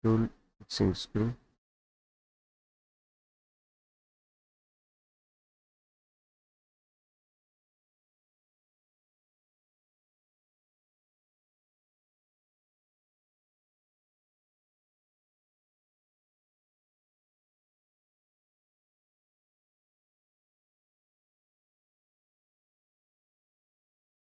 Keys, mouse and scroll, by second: 0.0 click, 1.0 middle click, 1.0-1.7 scroll, 2.9 click, 3.9 click, 5.0 middle click, 5.0-5.7 scroll, 6.1 click, 6.9 click, 7.3 ctrl+click, 9.5 click, 12.4 Escape, 13.0-14.0 scroll up 5, 14.2-15.7 drag, 15.8-17.7 drag, 18.6 click, 19.1 click, 19.6 click, 21.6 click, 23.7 click.